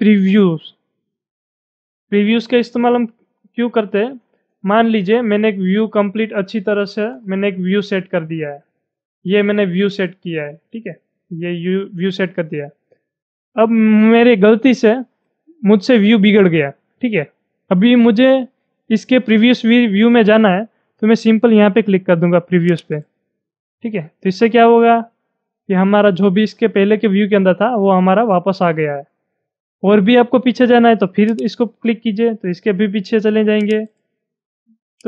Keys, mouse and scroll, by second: 2.3 middle click, 3.0-4.8 scroll up 26, 5.2 middle click, 5.4 scroll up 1, 6.3 shift+middle click, 6.4-7.2 shift+scroll down 5, 7.3 middle click, 8.0 shift+middle click, 8.4-9.8 shift+middle drag, 9.8-13.8 shift+middle drag, 15.0-18.1 middle drag, 22.7 click, 31.3 click, 33.6 click.